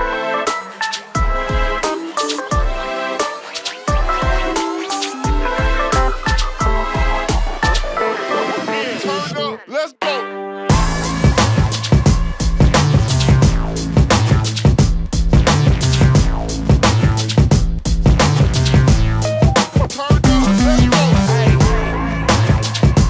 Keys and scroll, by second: 0.1 m, 1.9 ctrl+space, 3.1 m, 6.3 space, 7.7 shift+q, 10.6-11.4 typing, 14.4 space, 20.8 Up.